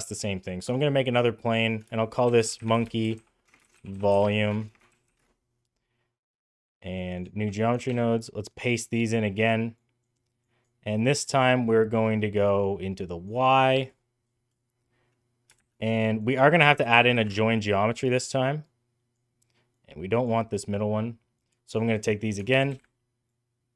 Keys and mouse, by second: 1.3 click, 1.5-5.5 shift+drag, 3.5 BackSpace, 4.5 BackSpace, 4.6 BackSpace, 7.7 ctrl+v, 8.4 click, 9.1 middle click, 9.6 click, 10.4 click, 11.3-13.1 drag, 15.5 shift+a, 18.6 click, 19.6-20.1 drag, 21.4 click, 22.1 middle click, 22.4 ctrl+c, 22.6 ctrl+v, 23.2 click.